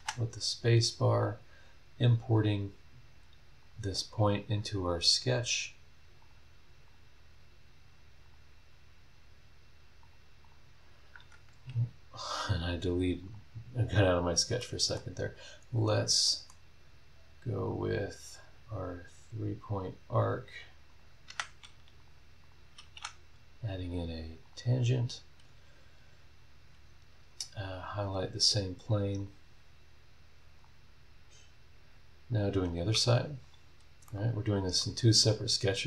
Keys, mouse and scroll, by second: 0.3 scroll down 1, 0.8 scroll up 1, 2.3 click, 3.6 click, 4.3 click, 6.2 click, 6.8 click, 8.2 click, 10.0 click, 10.4 click, 11.2 Escape, 12.7 scroll down 1, 13.1 click, 13.8 scroll down 1, 14.1 scroll up 1, 14.6 middle click, 15.7 click, 16.1 scroll down 1, 16.2 middle click, 17.6 click, 20.1 click, 20.9 click, 21.2 Escape, 22.0 click, 22.4 click, 22.9 t, 24.4 click, 29.2 click, 30.6 click, 32.3 click, 33.4 click, 34.1 middle click, 35.4 click.